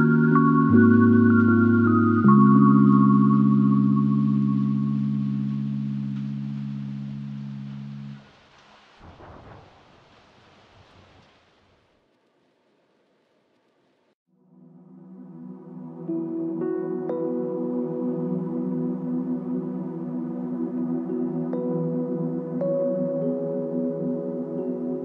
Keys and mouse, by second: 0.9 ctrl+click, 7.3 alt+click, 8.6 alt+l, 9.0 ctrl+click, 22.6 ctrl+click, 24.0 ctrl+click.